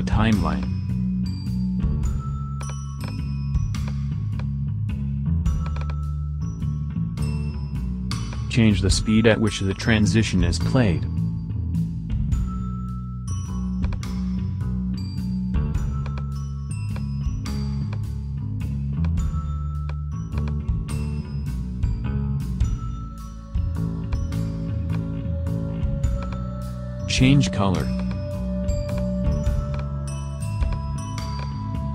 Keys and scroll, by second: 1.6 BackSpace, 14.3 BackSpace.